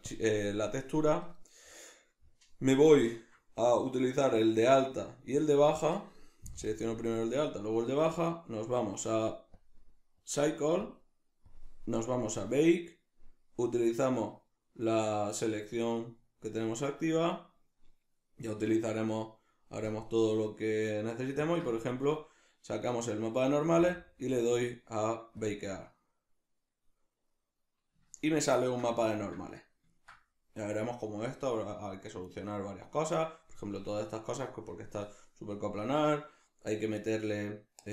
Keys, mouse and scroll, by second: 0.1 click, 2.9 Tab, 4.5 right click, 5.3 shift+right click, 6.7 click, 9.6-12.6 drag, 12.6-15.6 middle drag, 15.6 click, 16.1-19.9 middle drag, 19.9-22.3 drag, 22.3-25.4 middle drag, 25.4-26.8 drag, 28.1-37.9 ctrl+middle drag.